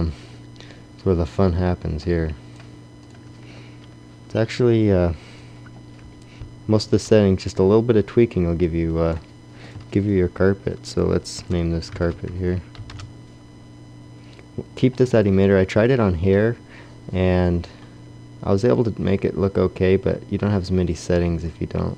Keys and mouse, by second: 1.9 middle click.